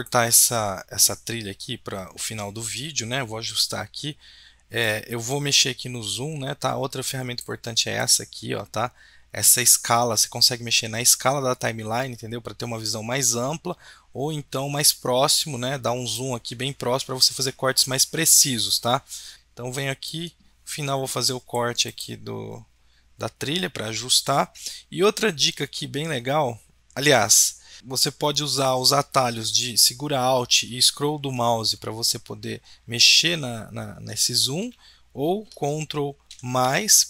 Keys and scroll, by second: 36.3 ctrl+=, 36.7 ctrl+=.